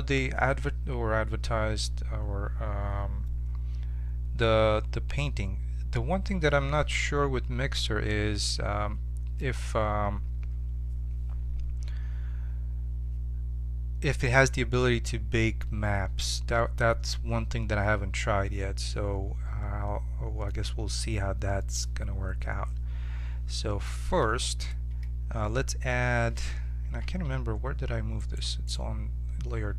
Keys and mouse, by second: 23.8-28.2 middle drag, 26.8 1, 28.2-29.7 right drag, 28.2 2, 29.5 Tab.